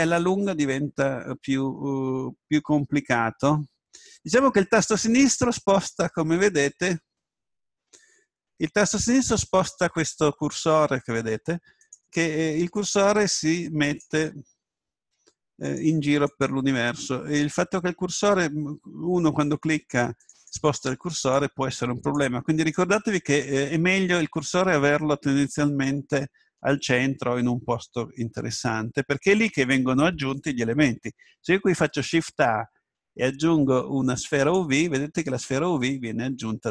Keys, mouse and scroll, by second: 5.3-7.2 drag, 9.1-11.3 drag, 11.8-18.9 drag, 20.5-24.4 drag, 31.7 shift+a, 34.5 shift+a.